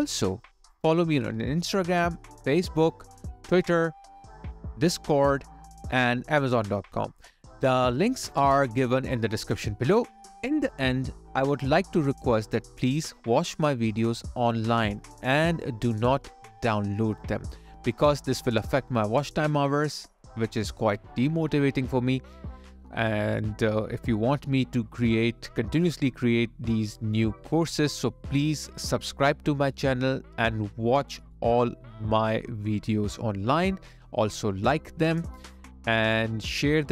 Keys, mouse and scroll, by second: 0.6 ctrl+z, 1.4 ctrl+z, 4.7 space, 14.6 alt+right click, 17.0 alt+right click, 17.6 alt+middle click, 18.2 alt+click, 18.7 alt+middle click, 19.1 alt+click, 21.6 ctrl+click, 22.7 alt+click, 26.4 alt+click.